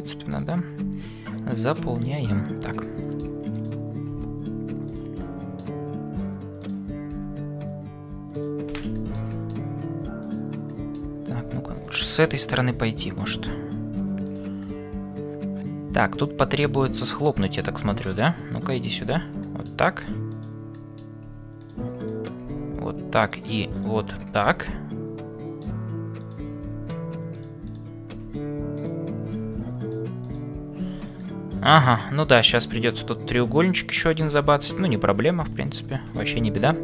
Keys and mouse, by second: 0.9 f, 2.0 middle click, 2.8 middle click, 3.5 click, 5.3 middle click, 6.6 click, 7.2 f, 8.9 middle click, 10.2 click, 10.8 middle click, 11.3 f, 12.2 middle click, 13.8 e, 14.6-16.4 middle drag, 17.7 e, 19.1 f, 19.5 middle click, 20.9 middle click, 22.5 f, 23.3 click, 24.4 f, 24.8 middle click, 26.7 e, 27.6 click, 28.8 click, 30.3 click, 31.3-33.1 middle drag, 35.3 shift+click.